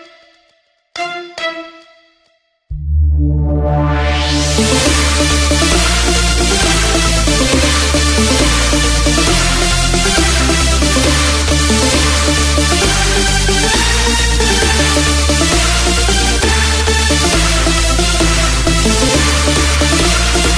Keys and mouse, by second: 13.5 KP_4, 15.5 KP_4, 19.5 KP_6, 20.2 KP_6.